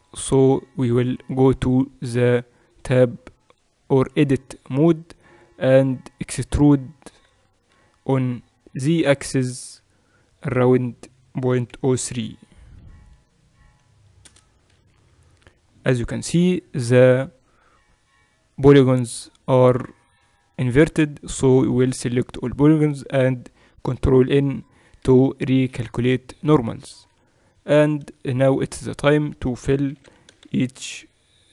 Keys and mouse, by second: 2.8-7.7 drag, 7.7 e, 16.4 KP_8, 16.8 KP_6, 21.7 a, 22.0 a, 24.3 ctrl+n, 25.7 Tab, 27.2 Tab, 29.9-31.2 drag, 29.9 e.